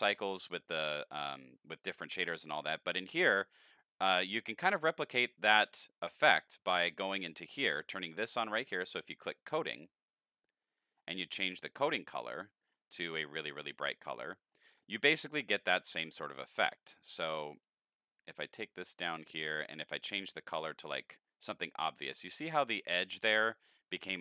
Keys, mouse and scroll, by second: 5.7 middle click, 9.3 click, 10.6 middle click, 11.3 scroll up 3, 11.8 click, 14.1 click, 14.5 middle click, 15.3 click, 16.7 click, 17.5 click, 18.5 middle click, 19.8 click, 20.8 click.